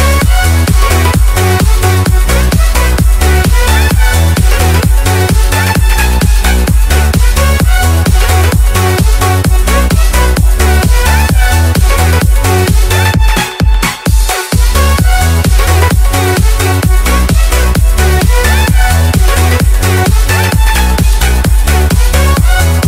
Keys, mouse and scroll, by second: 0.5 click, 1.4 F10, 1.6 right click, 1.9 scroll down 1, 2.2 right click, 3.2-4.6 typing, 4.7 Return, 5.4 scroll up 1, 7.2-10.1 typing, 10.2 Return, 11.6 click, 13.1-14.1 typing, 14.5 Return, 15.4 click, 16.3-19.1 typing, 19.6 right click, 20.2 ctrl+c, 20.5 ctrl+click, 20.7 typing.